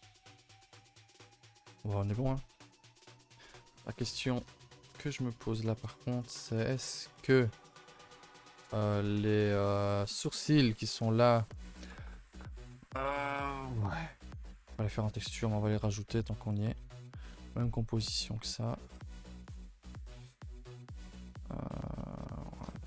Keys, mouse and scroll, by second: 0.3-0.9 scroll up 4, 0.9 scroll down 1, 1.2 a, 1.3 a, 1.7 ctrl+s, 2.1 middle click, 2.7 KP_0, 6.6 middle click, 6.7 scroll down 1, 6.9 g, 7.9 shift+middle drag, 8.1 scroll up 1, 8.2 4, 8.3 a, 8.5 3, 9.4-11.8 middle drag, 11.8 scroll down 2, 13.4-14.7 scroll down 3, 14.7-15.2 shift+middle drag, 15.2 ctrl+z, 15.4 ctrl+z, 15.8 ctrl+z, 16.5 click, 16.7 shift+middle drag, 16.9 scroll up 1, 17.9 click, 19.3 click.